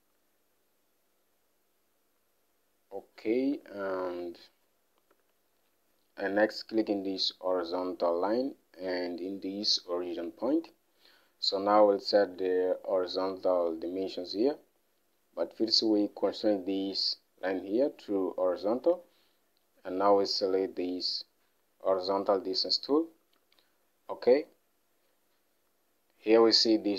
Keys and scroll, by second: 4.0 alt+Tab, 5.7 alt+Tab, 23.8 alt+Tab.